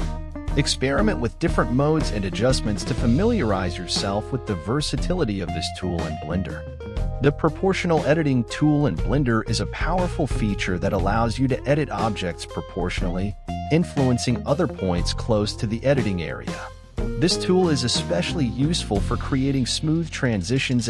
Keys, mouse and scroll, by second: 0.0 middle click, 0.6 g, 1.7 middle click, 2.2 g, 3.6-4.0 scroll down 6, 4.0 ctrl+z, 4.4 ctrl+z, 7.3 KP_1, 8.8 click, 10.6 click, 11.9-14.5 drag.